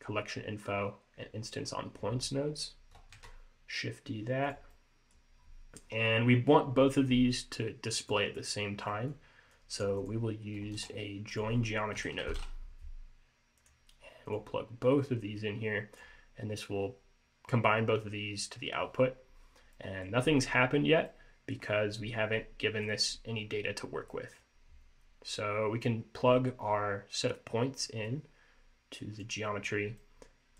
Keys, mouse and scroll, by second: 0.8-2.3 scroll up 2, 2.3-3.1 scroll down 3, 3.2 shift+d, 4.8 middle click, 8.1 click, 9.0 middle click, 9.6 click, 10.1 click, 10.8 shift+a, 15.3 click, 19.9 middle click, 20.3-20.7 scroll up 2, 20.7-21.2 scroll down 2, 21.2 middle click, 23.0 click, 24.3 middle click, 28.2 click, 30.1 middle click.